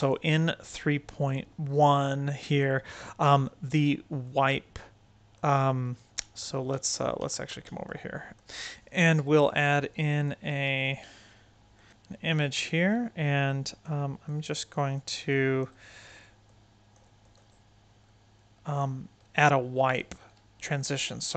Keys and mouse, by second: 1.9 right click, 2.4 right click, 3.0 right click, 4.2-5.3 right drag, 6.1 middle click, 6.6 middle click, 7.1 middle drag, 7.5-7.9 middle drag, 8.1 right click, 11.7 click, 11.9-13.7 drag, 14.2 click, 15.0 click, 15.2 click, 16.4 click, 17.1 click, 17.3-18.7 right drag, 19.1-19.9 drag, 20.1-20.8 right drag, 21.1-21.3 shift+right drag.